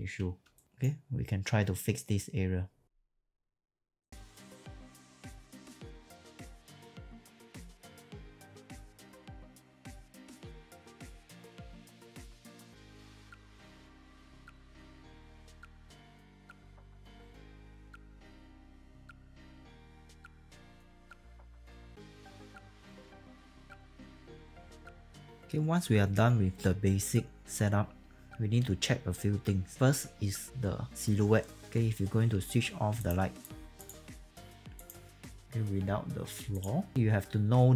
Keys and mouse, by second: 0.6 right click, 2.9 right click, 3.0 alt+click, 3.2 alt+middle click, 3.4 click, 3.9 click, 4.4 click, 4.6-10.8 typing, 4.8 alt+right click, 5.2 alt+click, 5.4 click, 5.6 click, 6.3 alt+middle click, 6.3 alt+click, 6.4 click, 7.7 click, 7.8 alt+click, 8.1 alt+click, 9.1 alt+click, 9.6 alt+middle click, 9.7 alt+click, 9.8 click, 10.4 alt+click, 10.9 click, 11.6 ctrl+z, 11.9 alt+right click, 12.0 click, 12.1 alt+click, 12.3 click, 12.7 alt+right click, 12.9 click, 13.0-19.2 typing, 13.6 click, 14.3 alt+middle click, 14.4 alt+middle click, 14.8 alt+right click, 15.0 alt+middle click, 15.2 click, 15.3 alt+click, 15.5 click, 15.7 click, 16.5 click, 16.7 click, 17.7 click, 19.0 alt+right click, 19.3 click, 20.2-25.6 typing, 20.6 click, 21.0 click, 22.5 click, 24.4 alt+middle click, 24.5 click, 24.7 click, 25.4 middle click, 32.9 click, 33.7 click, 34.7 click, 36.9 click.